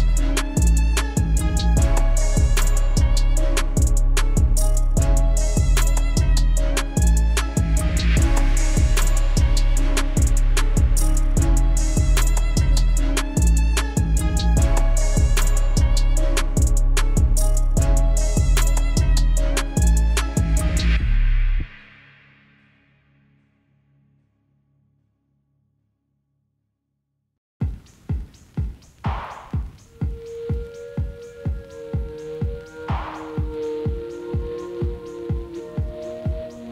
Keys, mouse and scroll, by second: 0.6 scroll down 2, 0.8 middle click, 1.6 Tab, 1.8 scroll down 1, 2.0 middle click, 2.3 click, 2.5-4.0 middle drag, 4.6 KP_1, 5.5 drag, 5.8-6.8 middle drag, 6.8 Tab, 7.1 click, 8.4 Tab, 8.6 middle click, 9.1 KP_1, 10.2 shift+right click, 11.2 shift+a, 11.6 s, 12.7 g, 14.3-15.7 middle drag, 16.8 KP_7, 17.4 g, 18.8-19.4 middle drag, 19.4-19.8 scroll up 2, 19.8-21.3 shift+middle drag, 21.3 Tab, 22.9 click, 23.4 3, 23.5 click, 23.9 x, 24.6 ctrl+z, 25.1 x, 25.9 click, 26.5 2, 26.7 click, 27.0 middle click, 27.5 shift+click, 27.8 middle click, 28.6 ctrl+b, 29.8 Tab, 30.0 ctrl+a, 30.5 Tab, 31.1 ctrl+b, 32.4 Tab, 32.6 middle click, 32.9 right click, 33.8 KP_1, 34.7-35.2 scroll down 1, 35.2 click, 35.4-35.8 scroll down 3, 35.8-36.2 drag, 36.6-36.7 middle drag.